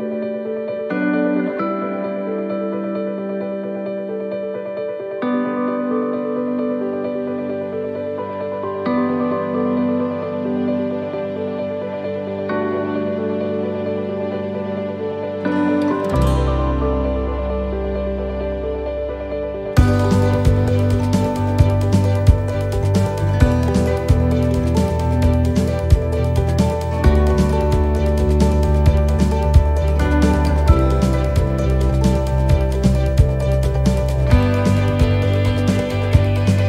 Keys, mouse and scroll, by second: 2.4 click, 2.4 x, 4.7 shift+d, 6.5 g, 10.8 click, 13.4 a, 14.6 click, 20.7 shift+middle click, 21.5 middle click, 21.8-22.7 scroll down 2, 23.2 click, 24.7 right click, 27.9 ctrl+z, 30.0 shift+d, 31.7 g, 35.0 middle click.